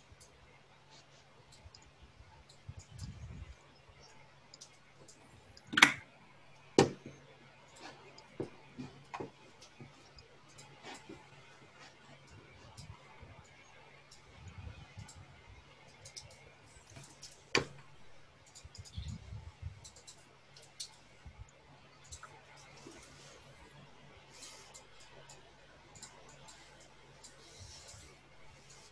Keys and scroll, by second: 4.7 Tab, 6.1-7.0 typing, 8.3 Escape, 8.9 Tab, 9.3-10.0 typing, 16.2 Tab, 16.7-17.8 typing, 20.1-23.7 typing.